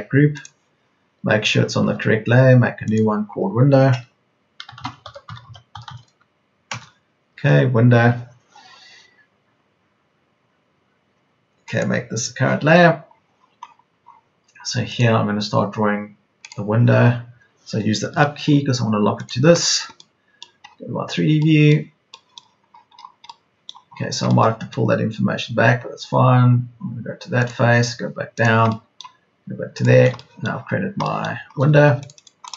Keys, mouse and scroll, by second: 1.7 Escape, 4.9-6.4 typing, 6.7 Return, 18.0 Up, 22.4 Up, 25.4 Up, 31.4 space, 31.6 Escape.